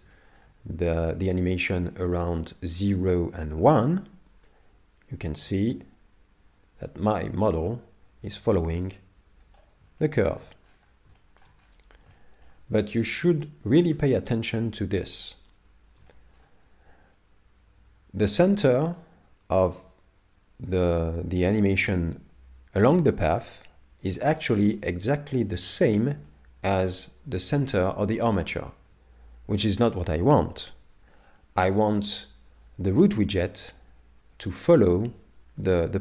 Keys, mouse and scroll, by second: 0.2 shift+middle click, 0.8-1.2 scroll down 4, 1.4 shift+middle click, 2.0-2.5 scroll up 5, 2.5 shift+middle click, 3.3 scroll down 2, 4.5 click, 10.0 shift+middle click, 10.6-11.2 scroll up 6, 11.2 shift+middle click, 11.6 scroll up 2, 12.1 shift+middle click, 12.8 scroll down 1, 13.9 z, 16.1 shift+middle click, 24.7 ctrl+Tab, 26.3 middle click, 28.0 middle click, 28.8 ctrl+Tab, 30.3 KP_7.